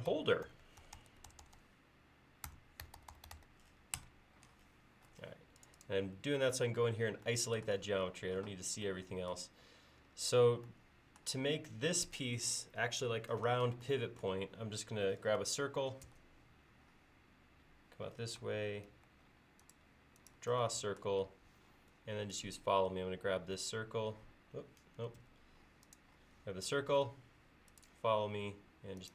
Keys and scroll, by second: 0.0-1.5 typing, 2.6-3.9 typing, 4.0 Return, 16.1 c, 18.5 Left, 19.1 Right, 25.3 space.